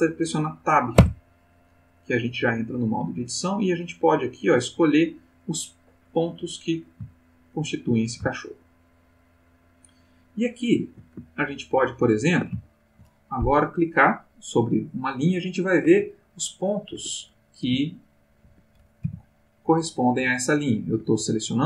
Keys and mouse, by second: 0.9 Tab, 5.2 click, 7.2-7.9 ctrl+middle drag, 8.4-9.2 shift+middle drag, 9.4-10.5 shift+middle drag, 10.6-12.5 shift+middle drag, 12.7 ctrl+shift+middle click, 13.9 click, 15.9 g, 16.9 Escape, 17.4 click, 17.7 g, 18.4 Escape, 18.8 click, 19.0 g, 19.7 Escape, 19.9 click, 20.2 g, 20.9 Escape.